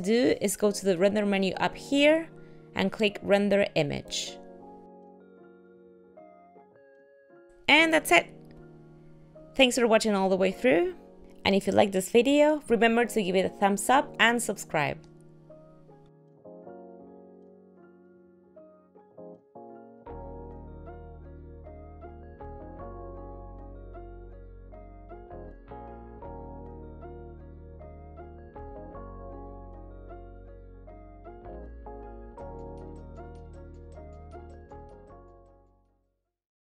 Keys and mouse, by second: 3.3 click.